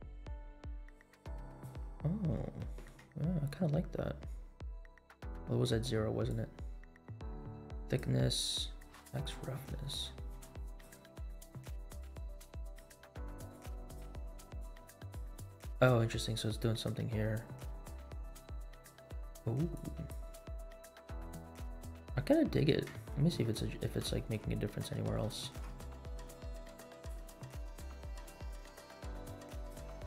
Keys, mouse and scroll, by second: 2.0 scroll down 2, 2.5-2.9 shift+middle drag, 3.2 scroll up 2, 6.2-8.3 drag, 8.6-11.2 drag, 11.9-13.2 drag, 13.5 click, 14.6 click, 16.6 click, 17.8-19.1 drag, 19.7 click, 21.0-21.4 scroll down 2, 22.2 scroll up 2, 22.6 scroll down 2, 23.0-23.4 shift+middle drag, 23.6 scroll up 2, 24.1-24.5 shift+middle drag, 24.6 scroll up 2, 25.3 shift+middle click, 26.4 click, 28.2-30.0 drag.